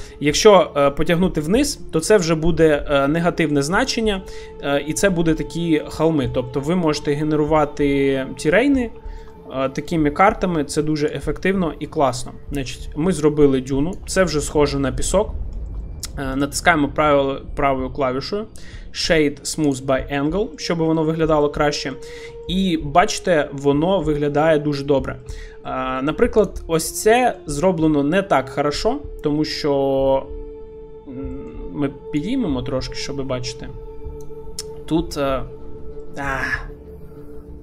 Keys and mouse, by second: 4.1-4.9 middle drag, 5.4-5.8 middle drag, 6.0-6.4 shift+middle drag, 6.5-7.1 middle drag, 7.7-8.6 middle drag, 9.1 shift+middle click, 9.3 middle click, 11.2-14.0 shift+drag, 14.3 shift+middle click, 14.6-15.0 middle drag, 15.5 shift+middle click, 15.8-16.4 middle drag, 16.4-20.3 right drag, 20.3 middle click, 21.0 shift+middle drag, 21.4-21.9 middle drag, 22.4 shift+middle click, 23.4-24.0 middle drag, 24.2 shift+middle drag, 25.3 shift+middle click, 25.7-26.0 shift+middle drag, 26.8 middle click, 27.2 shift+middle click, 27.6 shift+middle click, 28.3 Tab, 30.5 Tab, 31.4 shift+middle click, 32.2-34.9 drag, 35.0 Tab, 36.0 middle click.